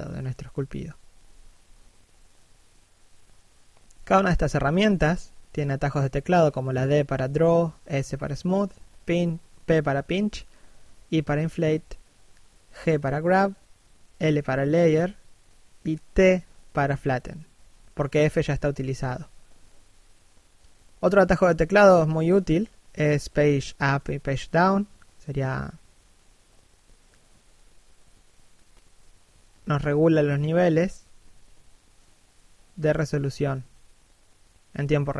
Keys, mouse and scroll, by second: 1.2 p, 4.9 g, 6.5 l, 8.1 t, 11.2 d, 12.1 f, 12.6 right click, 12.8 shift+f, 15.2 right click, 17.6 Page_Up, 18.3 Page_Down, 22.5-23.1 scroll up 1, 23.1 Page_Up, 23.9 Page_Down, 24.5 Page_Up, 25.0 Page_Down, 26.0 Page_Up, 26.6 Page_Down, 32.8 Page_Up, 34.7 scroll down 1.